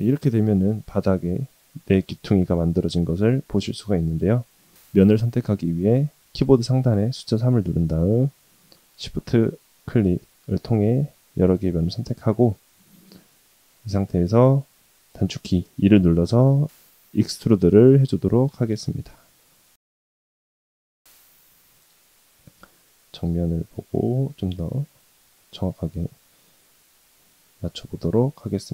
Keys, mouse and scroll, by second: 3.0 3, 7.4 click, 8.4 shift+click, 9.2 shift+click, 10.1 shift+click, 11.1-13.0 middle drag, 13.2 scroll down 1, 13.6 shift+middle click, 14.0 shift+middle click, 15.6 e, 22.3 KP_1, 24.3 g, 25.9 shift+middle click, 26.4-26.8 scroll up 1, 27.8-28.3 scroll down 3, 28.5 shift+middle click.